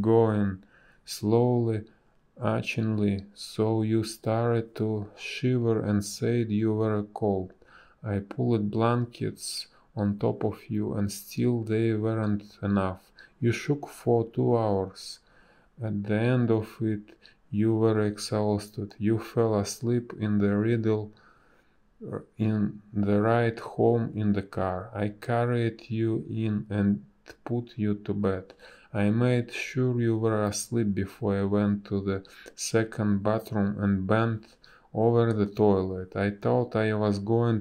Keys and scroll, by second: 3.9 space, 5.9 Delete, 7.5 space, 8.4 space, 13.5 Delete, 15.8 ctrl+z, 17.3 Delete, 22.3 space, 27.3 b, 31.9 space, 36.8 space.